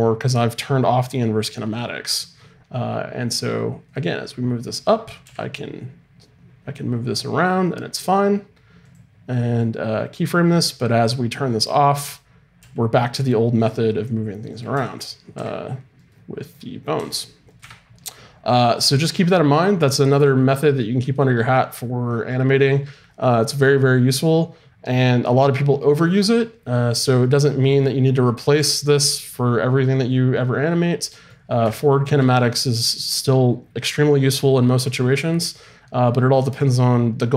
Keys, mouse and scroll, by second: 3.9-5.8 drag, 5.2 g, 11.4-13.2 drag, 12.6 g, 14.5 right click, 14.7 r, 16.4 right click, 16.9 r, 17.5 right click, 17.6 Escape.